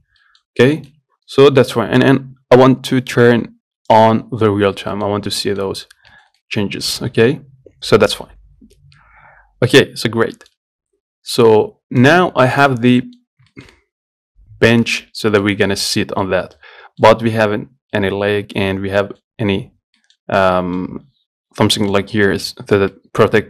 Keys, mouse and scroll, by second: 0.0 scroll down 1, 0.2 Tab, 0.5 middle click, 0.8 scroll up 1, 1.0-4.2 shift+middle drag, 4.2 click, 4.9-5.2 scroll down 1, 5.2 middle click, 5.4-5.7 scroll up 2, 5.7 middle click, 6.2 scroll up 1, 6.4-9.4 shift+middle drag, 10.6 shift+middle click, 11.0 scroll down 2, 12.3 click, 12.6 scroll down 1, 12.9 click, 13.2 middle click, 13.5 scroll up 3, 13.8-23.4 shift+middle drag.